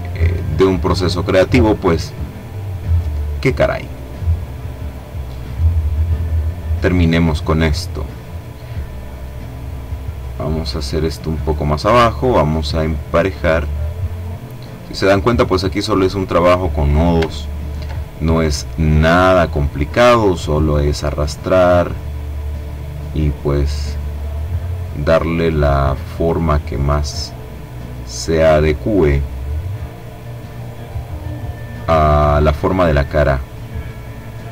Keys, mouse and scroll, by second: 0.6-2.4 drag, 5.2-7.0 drag, 7.3 click, 8.2-11.0 drag, 11.4-13.1 drag, 13.2-14.8 drag, 16.3-16.8 ctrl+scroll up 2, 17.8-19.5 drag, 19.9-21.4 drag, 21.9-23.7 drag, 23.7-25.1 drag, 25.3-26.6 drag, 27.2-29.0 drag, 29.4-31.4 drag, 32.4-34.5 drag.